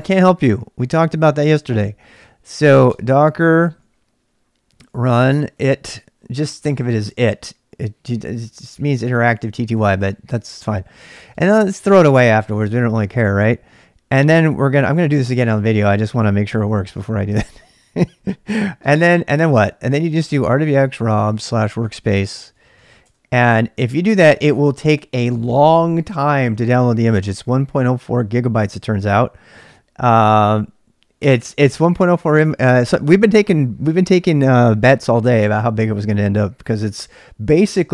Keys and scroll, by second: 2.9 space, 4.7-6.1 typing, 11.2-13.5 typing, 19.0-23.3 typing, 24.3 Return, 24.6 Return, 27.2 typing, 31.2 Return.